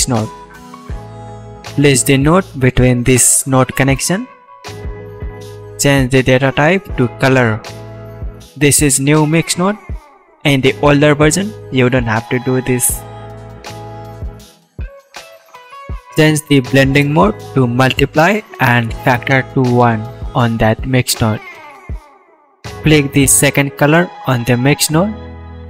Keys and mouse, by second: 0.4-1.2 drag, 1.2 middle click, 1.8 shift+a, 5.3-13.7 drag, 17.2-19.6 drag, 20.1-21.7 drag, 24.5 click.